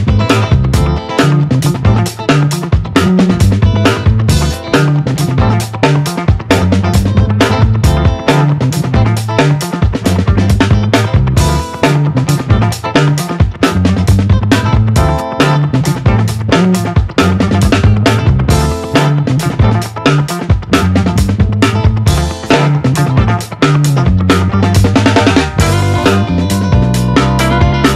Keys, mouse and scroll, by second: 1.6-3.8 drag, 6.7 right click, 8.5 click, 9.4 right click, 11.2 click, 14.8-27.9 drag.